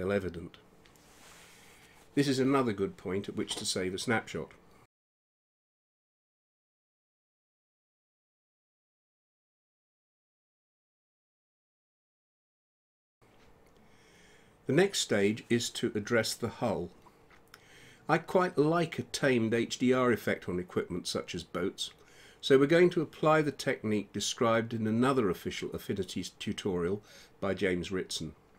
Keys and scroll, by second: 0.9-2.8 typing, 6.0 Return, 22.7 shift+h, 23.1 u, 23.7 l, 24.8 Return.